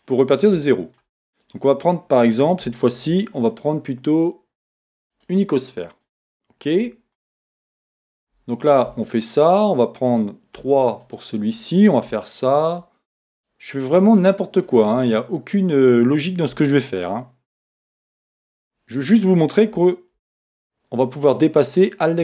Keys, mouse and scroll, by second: 0.0-11.0 middle drag, 3.0 shift+a, 8.9 Tab, 10.6 Tab, 10.6 3, 11.0 click, 11.1-12.6 middle drag, 12.6 shift+click, 13.4 shift+click, 13.8 shift+click, 14.7 shift+click, 15.6-15.9 scroll down 1, 16.5 e, 17.8 click, 18.1-22.2 middle drag, 20.2 ctrl+r.